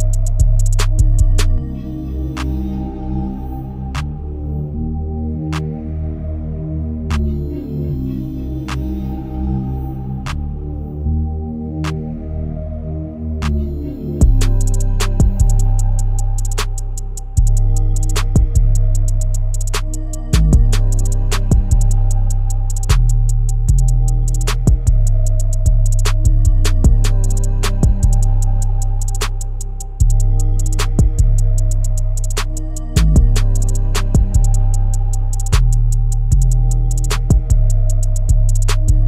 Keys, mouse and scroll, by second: 0.3-1.2 scroll up 1, 1.2 KP_1, 1.9-4.9 shift+middle drag, 4.9 scroll up 1, 4.9-7.4 shift+middle drag, 7.4-9.3 scroll down 4, 9.3-10.5 middle drag, 10.5-11.5 scroll down 1, 11.5 KP_1, 13.0 KP_7, 14.1 click, 15.4 r, 17.6 g, 21.0 KP_0, 22.0-22.7 scroll down 2, 23.1 n, 24.6 click, 25.7 click, 26.2-27.8 middle drag, 27.8 scroll down 3, 28.5-31.5 shift+middle drag, 32.5 click, 35.1 click, 36.2-38.8 drag, 38.8 KP_0.